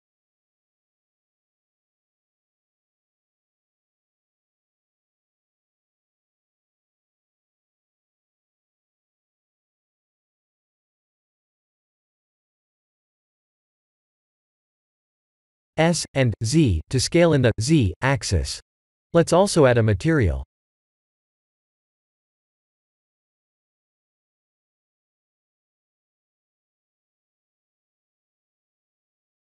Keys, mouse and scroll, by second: 5.2 KP_3, 5.4 KP_3, 6.1 r, 8.6 g, 11.0 KP_0, 12.8 s, 16.6 s, 19.7 middle click, 23.6 click, 25.4 click, 26.2 click.